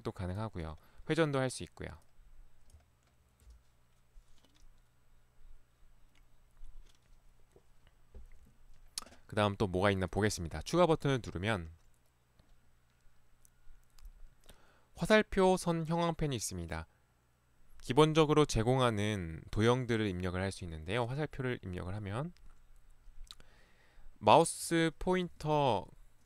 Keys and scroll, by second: 25.4 ctrl+1.